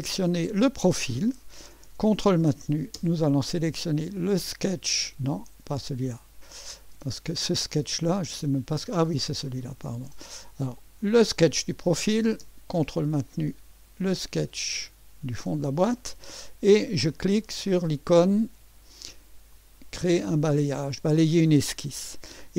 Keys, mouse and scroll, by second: 0.0 click, 4.1 ctrl+click, 5.0 ctrl+click, 6.9 click, 7.7 click, 7.9 click, 9.4 click, 11.0 click, 13.3 ctrl+click, 19.5 click.